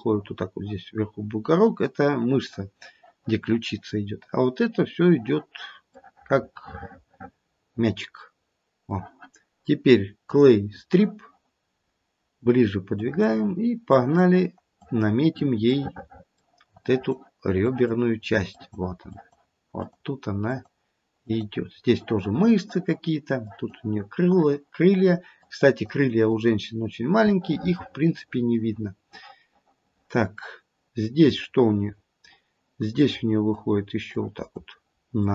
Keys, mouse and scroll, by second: 6.1 middle click, 6.4 middle click, 10.4 click, 11.8-13.0 scroll up 2, 13.0 click, 13.9 click, 14.7 click, 15.6 middle click, 16.8 click, 17.6 click, 18.4 click, 19.1 click, 19.8 click, 20.5 click, 21.2 click, 23.4 click, 24.2 click, 24.9 click, 25.4 click, 25.8 click, 26.2 click, 26.9-27.3 scroll down 3, 27.3 middle click, 31.4 middle click, 32.9 click, 34.1 click.